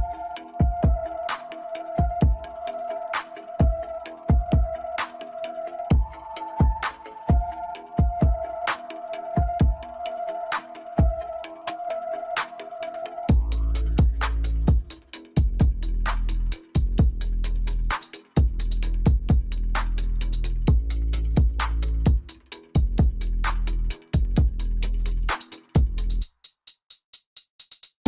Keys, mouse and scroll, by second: 7.6-7.9 scroll down 1, 7.9 scroll up 1, 8.0-8.8 middle drag, 8.8 scroll up 2, 9.4-10.4 scroll up 7, 10.4-11.9 middle drag, 11.9 click, 12.9 KP_7, 14.0-15.6 scroll up 6, 15.6 g, 16.7 KP_3, 17.5 middle click, 18.4 scroll down 1, 18.9 s, 20.6 ctrl+z, 20.9 scroll up 3, 21.2 Tab, 22.4-23.5 right drag, 23.5 click, 24.0 click, 25.1 click, 25.4 click, 25.6-28.0 right drag.